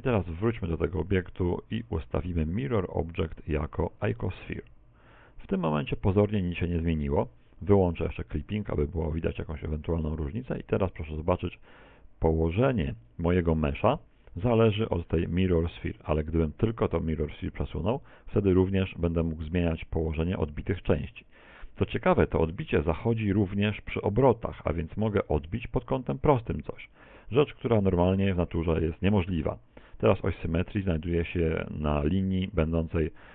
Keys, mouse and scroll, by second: 0.1 right click, 3.0 click, 8.2 click, 14.5 middle click, 15.9 ctrl+z, 16.4 right click, 17.2 click, 23.7 r, 30.1 ctrl+click, 30.5 middle click.